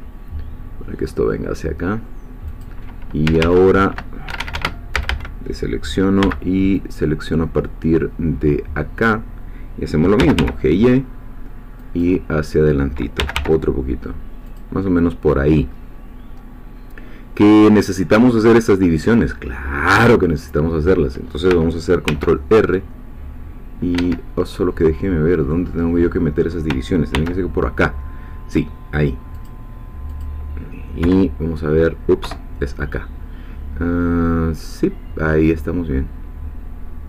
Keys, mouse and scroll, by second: 2.5 click, 3.3 q, 4.3 Escape, 4.9 a, 6.2 b, 6.7-9.2 drag, 10.2 g, 10.4 y, 11.8 click, 13.2 g, 13.3 y, 14.5 click, 15.7-16.3 scroll up 2, 16.3 scroll down 2, 16.5 middle click, 22.1 ctrl+r, 23.9 Escape, 24.4-25.8 middle drag, 25.8 scroll up 1, 27.1 ctrl+r, 29.3 click, 31.0 KP_1, 32.2 KP_3.